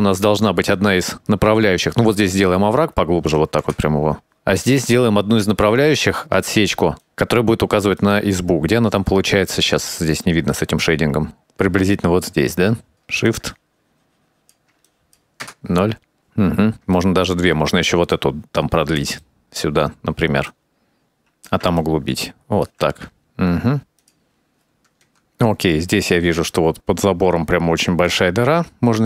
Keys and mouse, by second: 0.6-2.7 ctrl+drag, 3.3 KP_0, 4.3-5.7 drag, 5.9 click, 6.5 shift+click, 7.1 middle click, 8.1 middle click, 9.0 middle click, 10.2 click, 10.8 middle click, 12.0 click, 12.8 shift+click, 13.6 shift+click, 13.7 shift+click, 13.9-15.2 middle drag, 14.3 shift+click, 15.5 KP_0, 17.1 middle click, 18.0 shift+middle click, 18.7 click, 19.4 middle click, 20.2 click, 20.3 KP_0, 20.7 click, 20.9 shift+click, 21.0 shift+click, 21.6 ctrl+z, 21.9 middle click, 22.2 shift+click, 22.4 ctrl+click, 23.1 click, 24.0 KP_0, 24.6 shift+middle click, 25.3-26.7 drag, 27.1 shift+middle click, 28.2 click.